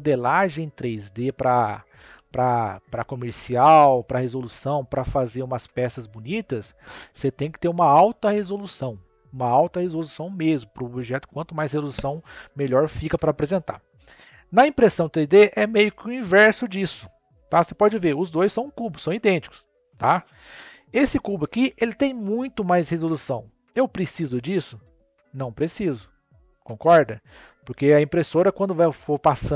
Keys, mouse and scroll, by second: 2.0 n, 18.6 click, 19.1 click.